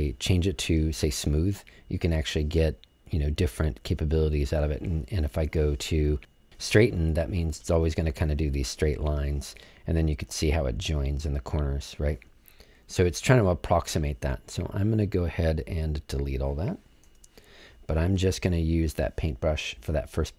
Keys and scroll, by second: 17.0 BackSpace, 20.0 BackSpace.